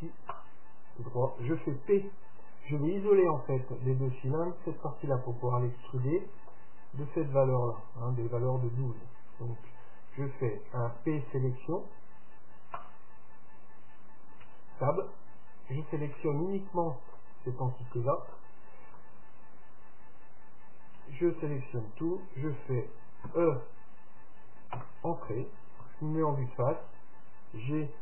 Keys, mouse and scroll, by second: 6.2-8.1 middle drag, 9.8 p, 12.9-14.8 right drag, 14.6 Tab, 15.2-16.9 right drag, 16.3-20.1 middle drag, 19.1 Tab, 21.1 a, 23.4 e, 26.0 KP_1.